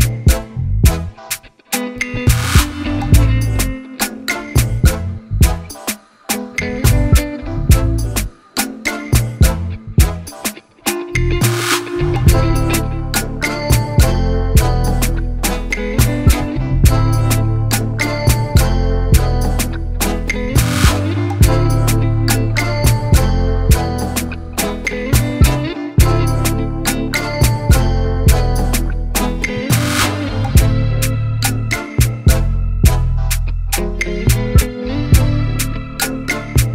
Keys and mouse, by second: 1.3 ctrl+j, 2.0 ctrl+t, 3.1 right click, 4.4 click, 5.6-7.8 drag, 7.8 Return, 11.9 click, 14.0 click, 14.6 Delete, 15.7 click, 16.5 shift+click, 17.8 ctrl+j, 19.1 ctrl+t, 19.8 right click, 20.6 click, 21.6-23.6 drag, 28.4 Return, 30.5-31.7 drag, 31.8 click, 32.2 click, 33.3 click, 33.7 click, 34.5 click, 36.6 click.